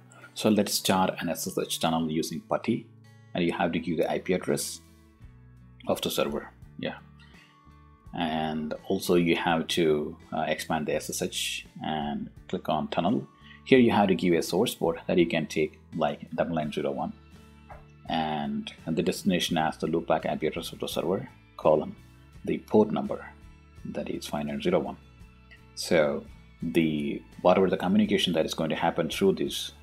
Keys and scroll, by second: 4.7 ., 5.6 5, 5.9 ., 14.2 1, 17.1 0, 18.5 ., 19.5-21.5 typing, 22.6 1.